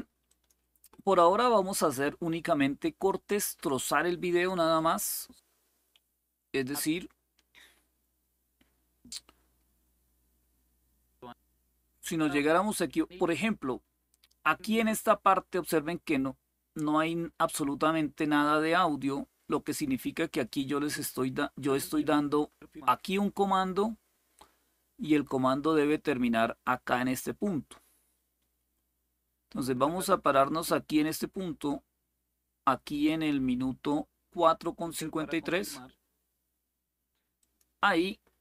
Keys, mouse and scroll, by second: 0.0 click, 4.5-30.8 drag, 34.5 click, 37.1 click.